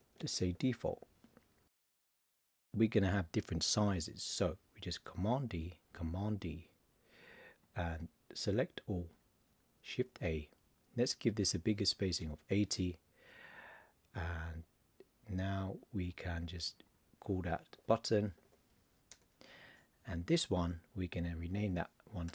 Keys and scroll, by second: 5.4 super+d, 10.0 shift+a, 17.7 shift+b, 22.2 shift+l.